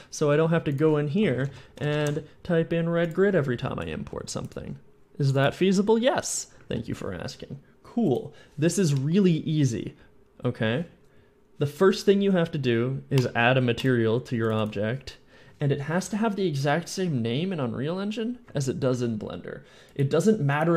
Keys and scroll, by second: 1.1-2.2 typing, 4.0 a, 4.0 s.